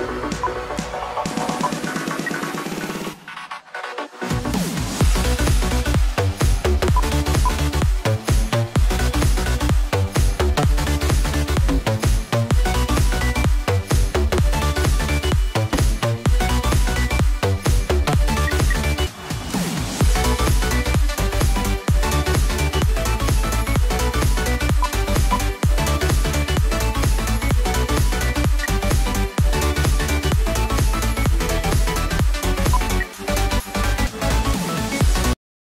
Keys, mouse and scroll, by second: 2.1 space, 3.4 right click, 7.4 ctrl+right click, 16.3 right click, 18.2-19.0 typing, 26.3 right click, 28.7 F2, 32.7 F2, 33.8-35.3 scroll down 1.